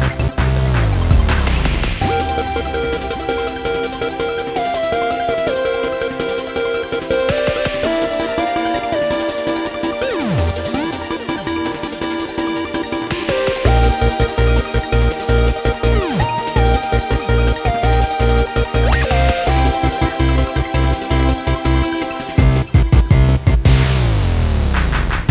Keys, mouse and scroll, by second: 12.3 scroll up 4, 12.7-13.5 scroll down 5, 13.5-14.8 middle drag, 14.8 scroll down 2, 15.7-18.1 scroll up 3, 19.4-20.4 drag, 20.4 scroll down 1, 20.6-23.8 middle drag, 23.8 ctrl+s, 24.2-24.6 scroll down 3, 24.6-25.3 scroll up 1.